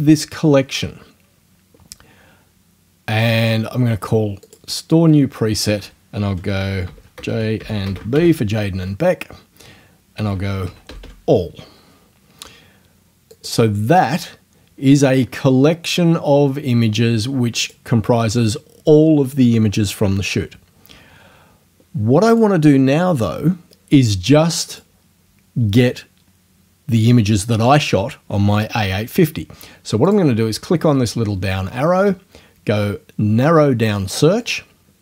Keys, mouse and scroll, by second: 4.5 click, 6.9-8.6 typing, 10.2-11.4 typing, 13.3 click, 17.7 click, 22.3 click, 24.7 click, 30.1 click, 34.4 click.